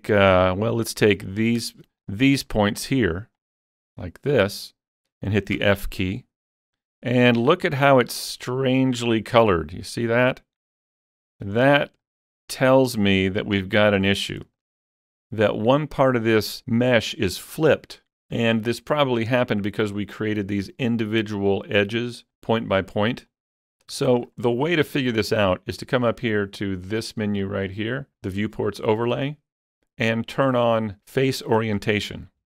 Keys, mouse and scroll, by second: 1.3 click, 1.3-2.0 typing, 2.0 click, 2.8 shift+click, 3.4 shift+click, 4.0 shift+click, 5.6 f, 7.5-11.5 middle drag, 11.3 scroll down 2, 11.6 shift+middle click, 12.0-15.0 shift+middle drag, 14.3 scroll up 1, 23.3-24.9 shift+middle drag, 24.5-24.9 scroll down 1, 29.0 click, 29.0 middle click, 29.0 scroll down 1.